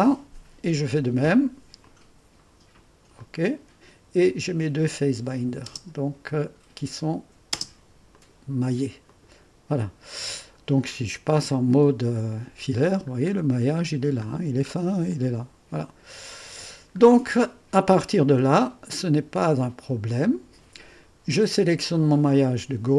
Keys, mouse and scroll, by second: 1.8 click, 3.1 click, 4.8 click, 5.9 space, 7.1 click, 7.5 typing, 8.1 click, 8.5-9.7 drag, 11.8 typing, 13.2-13.9 scroll up 1, 13.2 typing, 14.4-15.1 scroll down 1, 15.1 click, 16.2-17.0 typing, 17.0-17.8 scroll down 1, 20.4-21.9 drag.